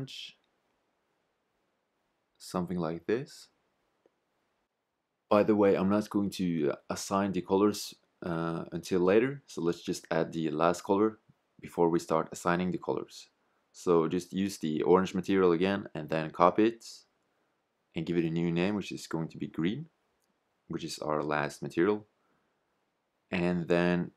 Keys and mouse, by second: 12.0-24.1 drag.